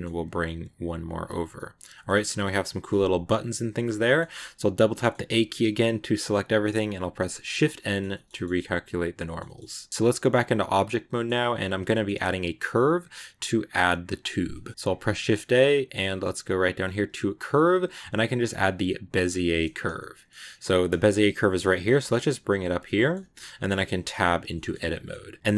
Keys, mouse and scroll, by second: 1.2 scroll down 2, 1.4-4.1 middle drag, 4.1 a, 4.7 middle click, 5.1 a, 5.4-7.2 middle drag, 7.1 n, 7.5 scroll down 2, 7.7 middle click, 7.9 a, 8.0 middle click, 8.2 scroll up 1, 8.4-11.4 middle drag, 11.4 scroll up 2, 11.8 shift+middle click, 12.0-14.2 scroll up 1, 14.2 scroll down 2, 14.4 middle click, 14.8 shift+a, 19.8-21.6 middle drag, 21.6 g, 22.7 middle click, 23.0 g, 24.4 shift+middle click, 24.6 scroll up 1, 24.7 middle click, 25.4 scroll up 1.